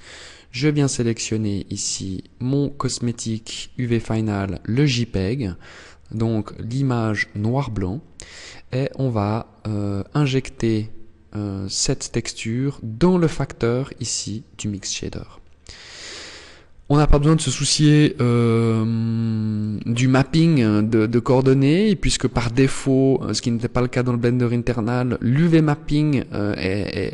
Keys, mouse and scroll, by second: 0.1 click, 1.0 click, 5.4 click, 6.6 click, 9.2 click, 13.2 click, 18.9 click.